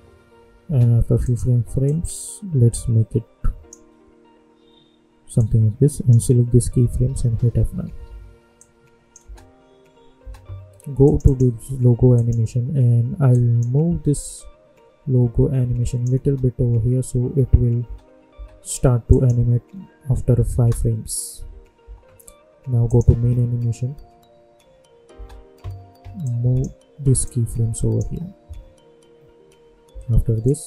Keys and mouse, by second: 1.2-7.0 drag, 7.0 F9, 7.8 =, 8.0 =, 8.5-16.2 drag, 16.2 space, 19.1 click, 20.5 space, 22.8 click, 23.1 space, 25.1 space, 26.2-28.0 drag, 28.0 space, 30.4-30.6 drag.